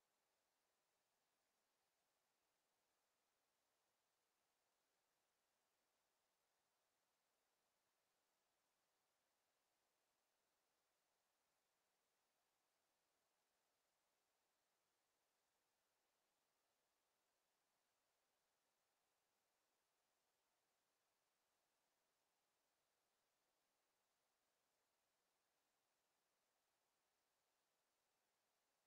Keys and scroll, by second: 6.0 ctrl+z, 9.1 ctrl+z, 13.6 ctrl+z.